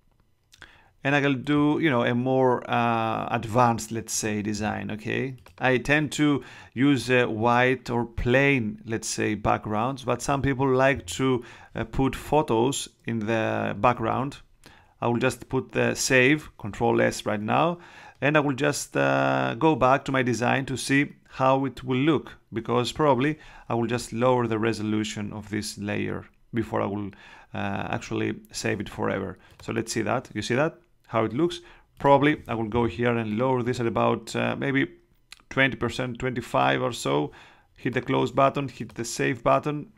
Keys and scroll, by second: 13.9 super+s.